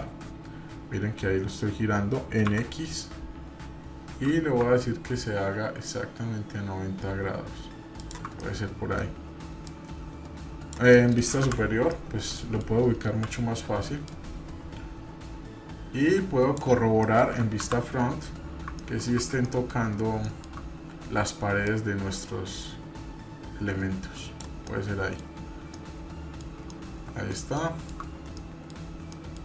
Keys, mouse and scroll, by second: 8.4 middle click, 9.7-10.7 drag, 10.9 middle click, 11.4 KP_7, 11.9-12.6 middle drag, 13.0 KP_7, 14.1-16.6 drag, 17.0 middle click, 17.6 KP_1, 18.1-18.8 scroll up 4, 18.8-19.2 ctrl+middle drag, 19.4-19.8 shift+middle drag, 19.9 scroll up 1, 20.2 shift+middle drag, 20.5-20.9 scroll up 2, 21.6 click, 24.6-25.2 middle drag, 25.3-25.7 scroll down 2, 25.7-26.4 middle drag, 26.7-28.0 shift+middle drag, 28.1 scroll down 1, 28.4 middle click, 29.1 middle click.